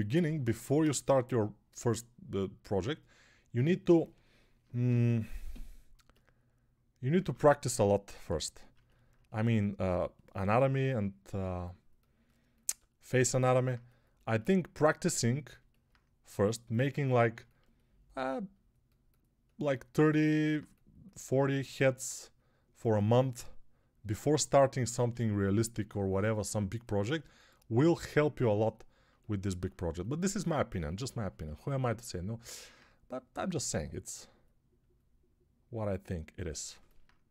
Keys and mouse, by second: 7.0 ctrl+Tab, 8.6-37.3 ctrl+alt+drag, 25.1 alt+q.